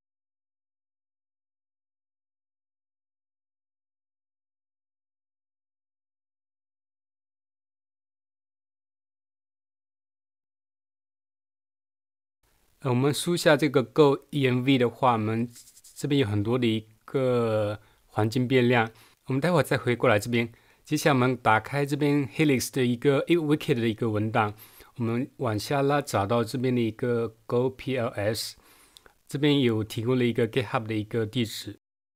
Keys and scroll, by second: 0.0-1.3 typing, 7.5 super+2, 10.5 super+1, 11.5 super+2, 12.1 space.